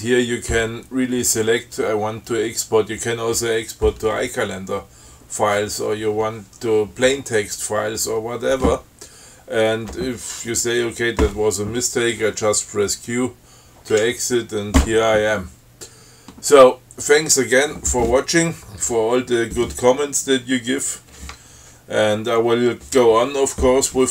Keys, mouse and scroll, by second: 14.2 q.